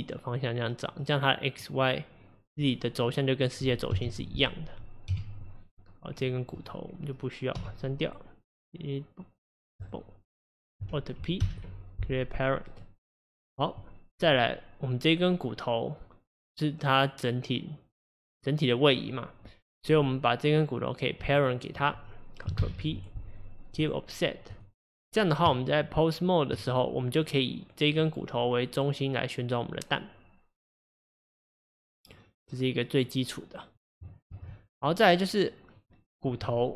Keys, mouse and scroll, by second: 1.0-3.9 middle drag, 3.9 KP_1, 5.1 KP_3, 6.1 click, 6.6 click, 7.6 x, 11.4 alt+p, 13.3 click, 14.3 click, 20.0 click, 21.3 shift+click, 22.6 ctrl+p, 24.6 click, 25.5 Tab, 27.1 click, 28.0 click, 34.4 ctrl+z, 34.7 click, 35.8 click.